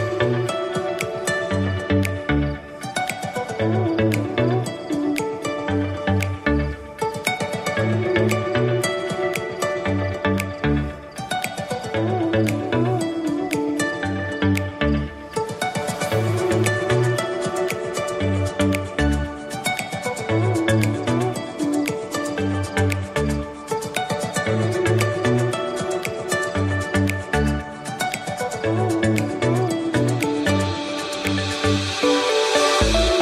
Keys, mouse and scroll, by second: 3.0-3.8 scroll down 6, 3.8 scroll up 3, 5.3-7.3 drag, 7.3-8.6 middle drag, 8.6 Tab, 9.1-11.5 middle drag, 11.5 s, 14.7 Tab, 15.2-16.2 middle drag, 16.2 Tab, 17.0 s, 18.7 Tab, 19.3-22.9 middle drag, 22.9 click, 23.2-25.1 middle drag, 25.1 click, 25.7 scroll up 2, 26.5 s, 28.6 middle click, 29.5 drag, 29.9 scroll down 3, 30.2-32.8 middle drag, 32.8 shift+a.